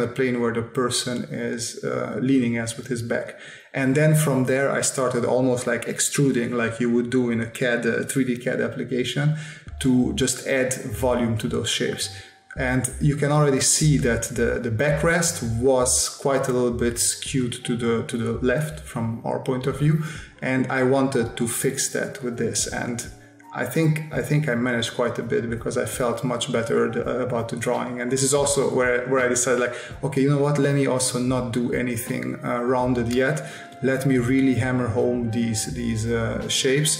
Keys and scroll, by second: 3.9 space, 4.9 space, 6.3 space, 7.8 space, 11.7 space, 13.3 space, 15.3 space, 17.8 s, 21.9 space, 25.6 space, 27.2 space, 29.2 space, 30.5 space, 36.5 space.